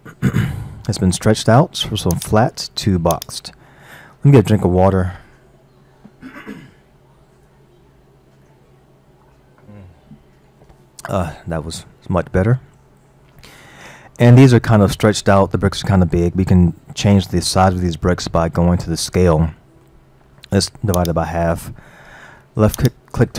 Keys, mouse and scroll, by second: 2.1-5.2 drag, 13.4-15.6 middle drag, 15.6-16.3 scroll down 4, 17.1-21.0 middle drag, 21.0 click.